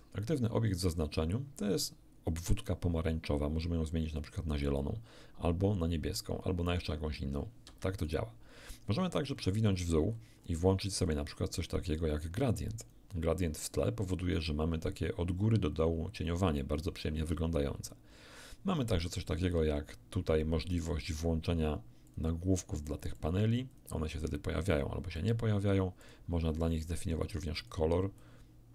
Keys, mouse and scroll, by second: 2.3 click, 3.6-8.3 drag, 7.7 Escape, 9.2-9.5 scroll down 2, 10.1 scroll down 2, 10.9-11.3 scroll down 2, 12.8 click, 19.5 t, 22.1 click, 22.7 click, 23.7 click, 24.2 click, 24.7 click, 25.1 click, 26.0 click, 27.2-27.9 drag, 28.2-28.7 drag.